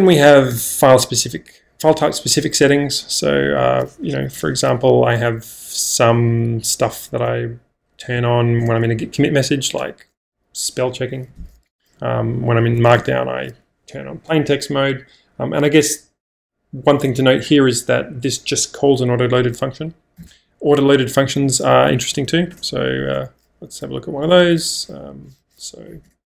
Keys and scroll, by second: 0.6 Return, 1.8 typing, 3.6-4.3 typing, 6.1 k, 7.7 k, 8.7 Return, 9.8 typing, 11.3 -, 12.0 j, 12.3 j, 12.7 j, 13.0 Return, 14.2 typing, 20.2 -, 21.9 k, 22.1 k, 22.2 k, 22.6 Return, 23.5 j, 23.8 j, 24.6 j, 25.4 j, 26.1 Return.